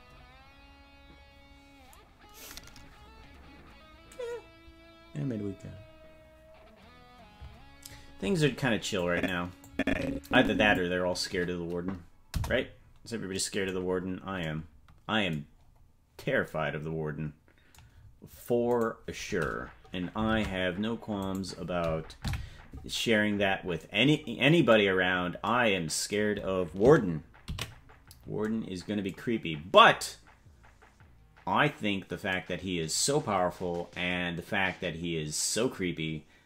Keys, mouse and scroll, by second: 9.1 click, 9.7-10.8 drag, 12.3 KP_0, 13.8-14.3 scroll down 4, 14.4 scroll down 3, 15.6-16.1 scroll down 2, 18.8 right click, 20.3 ctrl+Tab, 21.3 right click, 22.2 KP_Decimal, 23.1-23.7 scroll down 10, 25.1 scroll down 1, 30.0 ctrl+s.